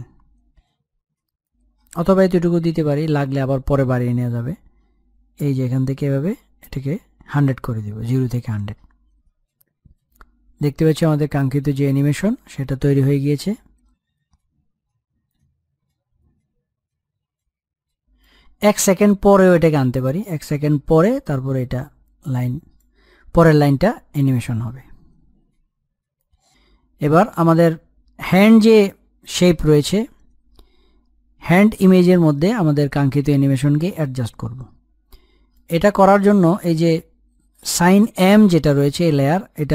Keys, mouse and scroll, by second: 6.8-16.8 drag, 16.8-17.1 scroll down 1, 17.1-17.6 scroll up 1, 17.6-20.0 drag, 20.0-21.0 scroll up 1, 21.0-28.1 drag, 28.1-29.5 scroll down 1, 35.4 click, 37.6 click.